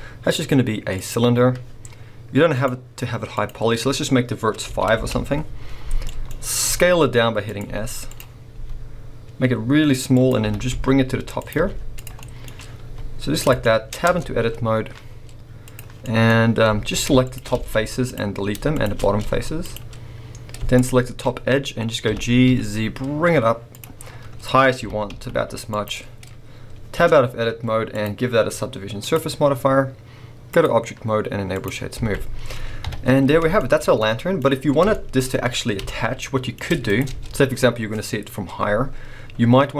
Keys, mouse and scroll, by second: 2.5-6.1 drag, 5.1 Return, 5.7-6.1 scroll down 2, 6.1-7.6 middle drag, 6.3-6.6 scroll up 2, 6.6 s, 7.6 click, 8.2 z, 8.5 s, 10.3 click, 10.4 g, 11.5 click, 11.6 z, 12.2-13.5 middle drag, 12.4 scroll, 12.8 s, 13.6 shift+middle click, 13.9 scroll, 14.1 Tab, 15.7 click, 16.0 middle click, 16.6 scroll up 2, 16.8 alt+a, 17.2 alt+shift+click, 17.5 x, 18.7 alt+shift+click, 19.2 x, 20.7 alt+shift+click, 21.3-21.6 scroll down 2, 22.0 g, 23.8 click, 24.0-24.8 scroll, 24.8 g, 25.8 click, 26.1 scroll, 26.9 Tab, 27.2-27.9 scroll up 1, 27.9-33.6 drag, 31.9 alt+a, 32.8 KP_1, 33.6-36.9 shift+middle drag, 34.4-34.9 scroll up 2, 35.3-35.9 scroll up 2, 36.9 click, 37.1 Tab, 39.2-39.7 scroll up 2.